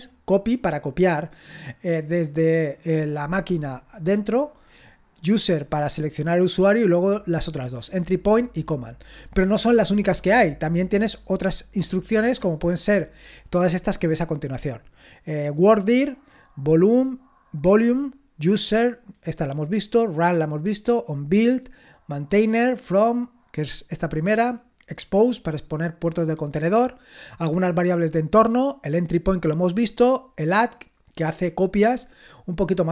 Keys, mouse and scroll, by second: 12.0-12.8 scroll down 1, 12.8-14.2 scroll up 1, 14.2-14.8 scroll down 2, 29.8-31.9 scroll up 2, 31.9-32.6 scroll down 2, 32.6-32.9 scroll down 2.